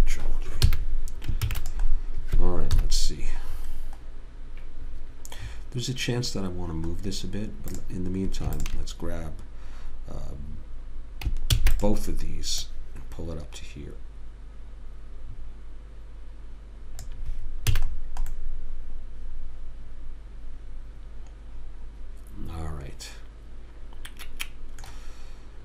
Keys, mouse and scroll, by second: 0.2 ctrl+j, 1.1 a, 1.8 ctrl+s, 3.1 KP_3, 7.4 middle click, 8.1 click, 11.8 shift+d, 13.0 click, 18.1 a.